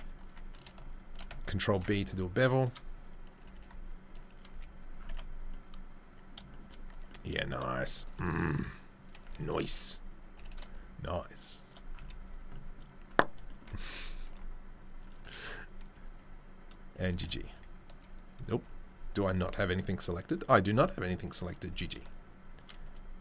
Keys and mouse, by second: 1.1-3.0 ctrl+middle drag, 1.7 ctrl+b, 3.1-7.9 middle drag, 3.4 g, 4.5 z, 5.1 Tab, 6.9 Tab, 7.9 ctrl+click, 8.0 ctrl+r, 8.2-15.5 middle drag, 9.3 1, 10.3 g, 12.0 z, 14.2 ctrl+r, 15.5 right click, 15.6 middle click, 16.0-17.2 right drag, 16.9 g, 17.1 g, 17.2 shift+click, 18.0-21.4 right drag, 18.3-20.3 drag, 18.3-20.3 middle drag, 19.3 z, 20.7 g, 21.4-23.2 middle drag, 21.6 g.